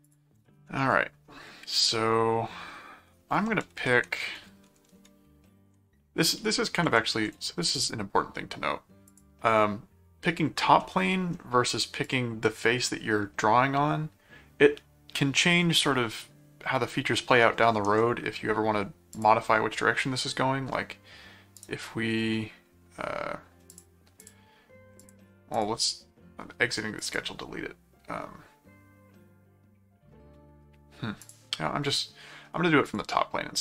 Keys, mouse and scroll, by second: 0.0 click, 0.9 ctrl+5, 3.6 ctrl+7, 5.2 ctrl+6, 6.8 ctrl+7, 9.0 click, 10.8 middle click, 12.0 click, 19.1 click, 21.6 right click, 23.7 click, 25.0 click, 27.0 click, 31.2 click, 32.9 click.